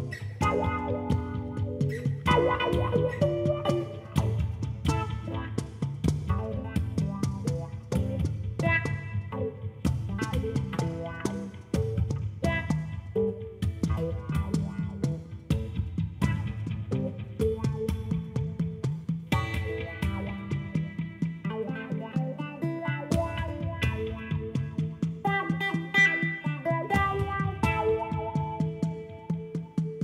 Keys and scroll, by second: 2.2 alt+a, 2.5 l, 5.3 g, 5.5 x, 7.2 alt+a, 12.9 shift+d, 13.0 z, 18.2 alt+a, 18.8 l, 21.9 Tab, 25.3 Tab.